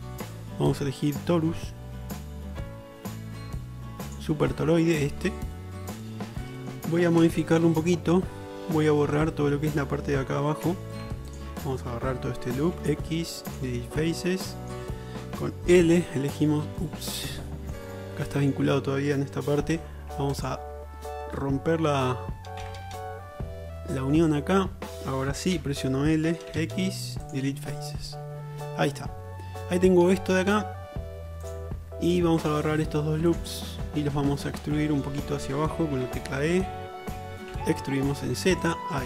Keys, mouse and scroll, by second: 4.2-7.3 drag, 7.3 Tab, 7.3-8.4 middle drag, 8.4-10.7 drag, 10.7 3, 11.4-17.1 ctrl+alt+middle drag, 12.7 x, 16.9 l, 19.8 2, 20.2 alt+click, 22.8 v, 25.6 l, 26.6 x, 27.1 click, 27.4-33.4 middle drag, 33.4 alt+shift+click, 33.5-34.5 alt+shift+middle drag, 34.5-35.3 alt+drag, 35.3-39.0 middle drag, 36.1 e.